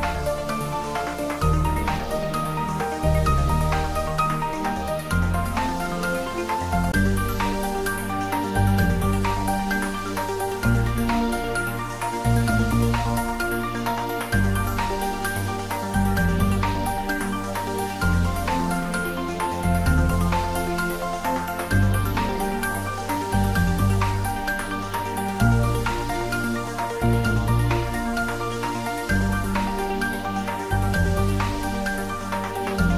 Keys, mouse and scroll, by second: 9.3 m, 14.0 m, 15.7 d, 18.9 ., 21.0 u, 24.8-26.7 typing, 32.7 click.